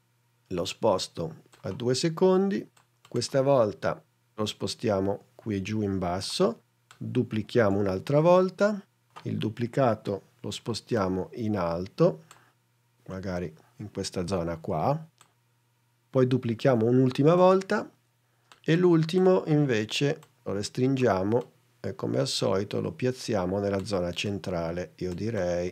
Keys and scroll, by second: 7.7 super+d, 17.5 super+d.